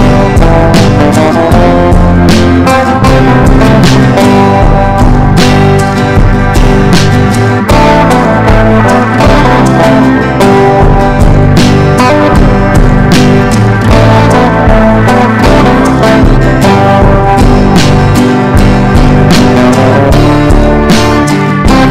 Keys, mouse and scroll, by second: 0.1 Delete, 0.9 click, 1.1 Delete, 1.6 click, 1.8 Delete, 2.1 click, 2.3 Delete, 3.0 click, 3.3 Delete, 4.0 click, 4.3 Delete, 4.9 Delete, 5.5 click, 5.6 Delete, 6.8 click, 7.0 Delete, 7.4 click, 7.5 Delete, 7.8 click, 8.0 Delete, 8.6 Delete, 9.2 click, 9.3 Delete, 9.8 Delete, 10.2 click, 10.9 Delete, 11.1 click, 11.6 Delete, 12.2-14.8 drag, 14.8 Delete, 15.3 click, 15.6 Delete, 16.2-20.8 drag, 21.0 Left, 21.3 Left, 21.8-21.9 drag.